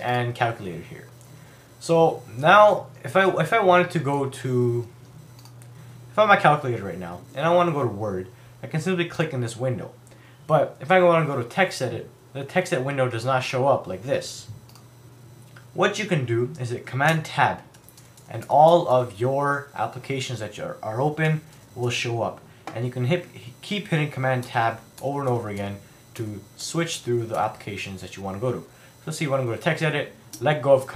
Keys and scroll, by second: 17.1 super+Tab, 24.4 super+Tab.